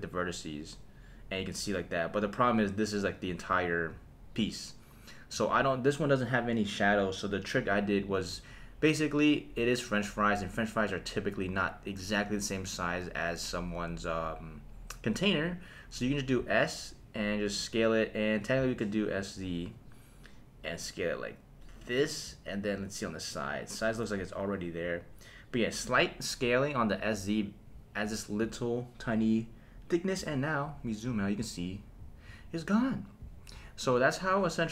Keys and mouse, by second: 3.5 super+z, 4.1 middle click, 5.4 Tab, 8.0 click, 16.3 s, 18.6 z, 22.0 click.